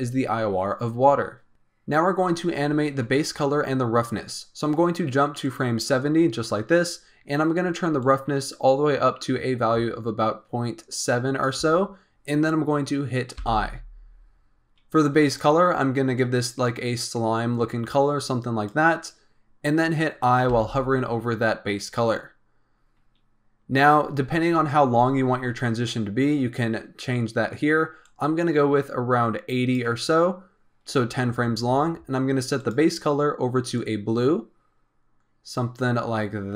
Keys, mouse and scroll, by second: 5.5-11.0 drag, 15.2 click, 28.1-31.0 drag, 32.5 click.